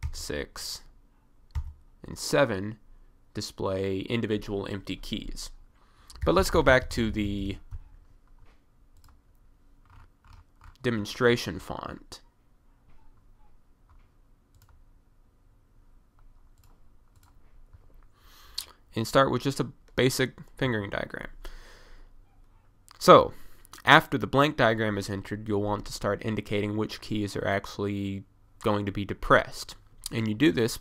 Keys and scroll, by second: 0.2 6, 1.6 7, 6.3 BackSpace, 6.4 BackSpace, 20.7 1.